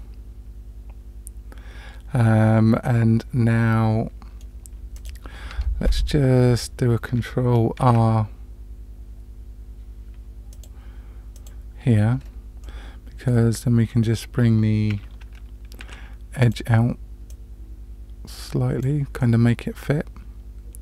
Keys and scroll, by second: 5.5 Tab, 7.9 ctrl+r, 15.8 2.